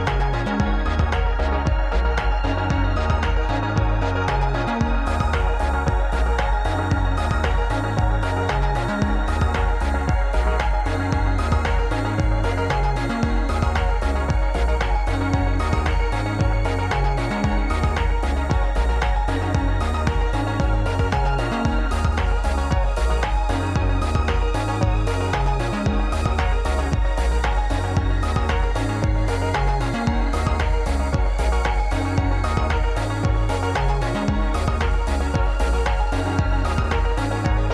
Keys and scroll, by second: 0.1 KP_1, 2.8 ctrl+a, 3.8 ctrl+a, 4.6 ctrl+a, 5.6 Escape, 9.0 ctrl+a, 10.0 ctrl+a, 11.2 Tab, 11.5 alt+z, 12.7 a, 13.6 s, 14.5 s, 15.1 ctrl+s, 15.7 ctrl+a, 17.4 alt+z, 17.9 ctrl+a, 20.0 g, 21.5 g, 22.1 g, 24.2 Tab, 24.7 alt+z, 26.2 shift+d, 27.8 s, 28.8 Tab, 30.3 alt+z, 30.7 a, 31.0 g, 32.0 Tab, 33.6 s, 34.6 r.